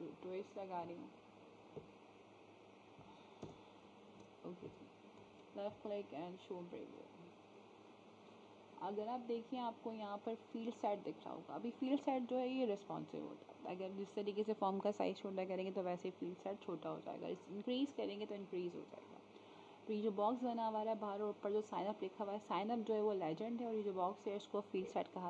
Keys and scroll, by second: 4.1 ctrl+v.